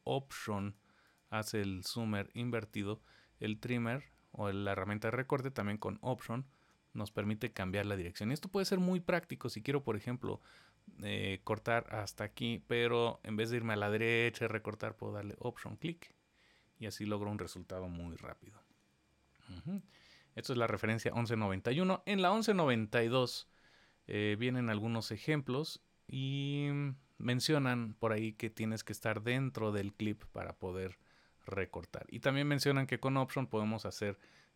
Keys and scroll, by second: 18.0 super+z.